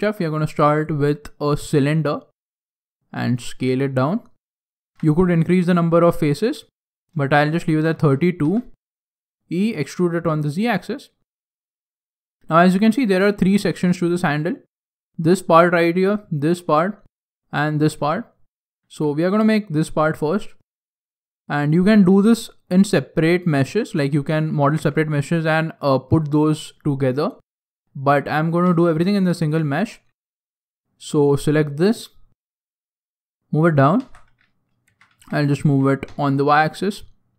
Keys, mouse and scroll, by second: 1.6 click, 2.8 s, 4.9 g, 5.9 s, 6.6 shift+middle click, 7.6 s, 9.1 click, 9.7 g, 11.2-11.6 scroll down 4, 11.6 shift+middle click, 11.6 shift+scroll up 1, 11.8 shift+scroll down 1, 13.0 g, 13.7 scroll down 2, 14.0 shift+middle click, 14.5 scroll up 2, 15.6 shift+middle click, 18.9 g, 20.2-20.7 scroll up 5, 22.0 g, 23.4 click, 23.9 shift+middle click, 28.6 Tab, 29.1 scroll up 2, 29.2 scroll down 1, 29.5 shift+middle click, 30.4 alt+right click, 31.8 alt+right click, 33.0 click, 33.9 Tab, 34.8 g.